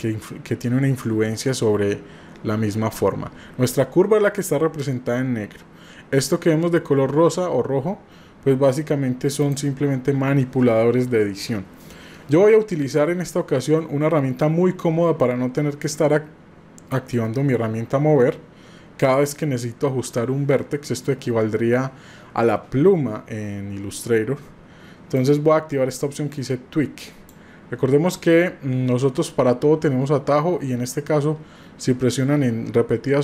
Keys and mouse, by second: 12.9-24.0 drag, 25.2-27.3 drag.